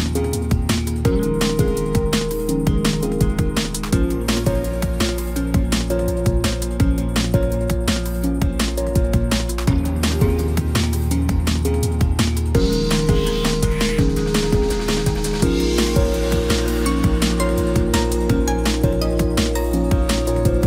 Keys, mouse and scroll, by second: 7.2 ctrl+t, 15.8 Left.